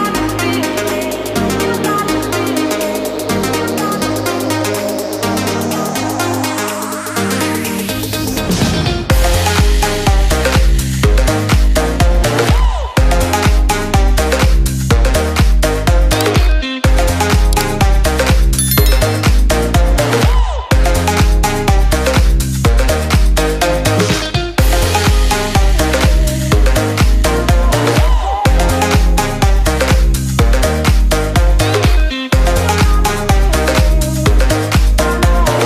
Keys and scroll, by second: 8.0 ctrl+g, 19.0 ctrl+space, 24.4 ctrl+shift+], 32.8 ctrl+space.